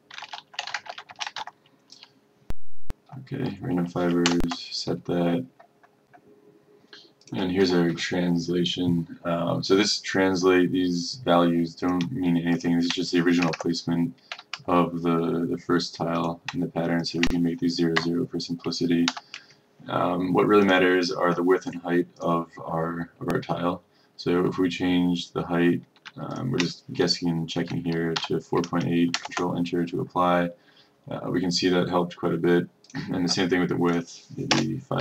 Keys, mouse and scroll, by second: 0.0-1.5 typing, 3.0 typing, 4.4 Return, 6.2 click, 12.6 shift+click, 13.6 BackSpace, 14.6 KP_0, 16.3 click, 17.2 shift+click, 18.1 KP_0, 19.2 End, 20.8-21.8 drag, 26.4 shift+click, 28.2 KP_8, 29.2 Return, 33.0 click, 34.6 BackSpace.